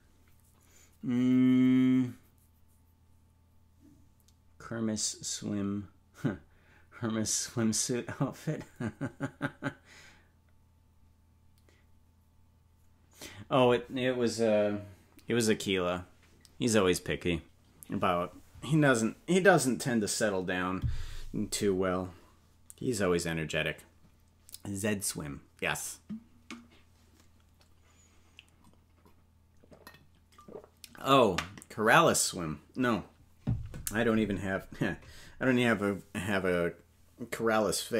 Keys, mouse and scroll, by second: 1.4 space.